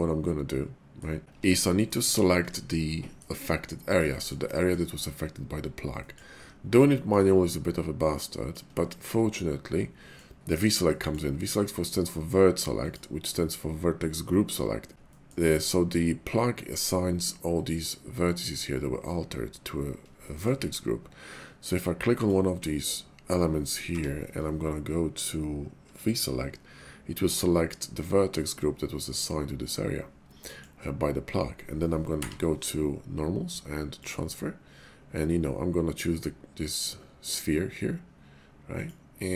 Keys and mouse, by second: 1.2 Tab, 1.3 Tab, 1.7 click, 2.5 shift+click, 2.9 click, 4.1 shift+click, 4.5 click, 6.0 middle click, 6.9 shift+middle click, 7.4-8.6 middle drag, 8.8 shift+middle click, 9.4 middle click, 10.8 shift+middle click, 14.1 middle click, 15.0 shift+middle click, 20.3 shift+middle click, 22.1 click, 23.9 y, 29.7 middle click, 32.1 y, 38.7 click, 39.2 Tab.